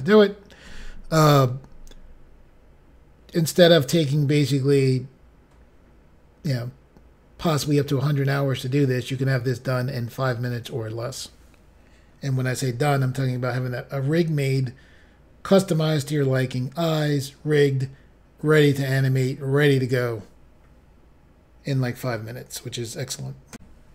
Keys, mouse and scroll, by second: 23.5 Pause.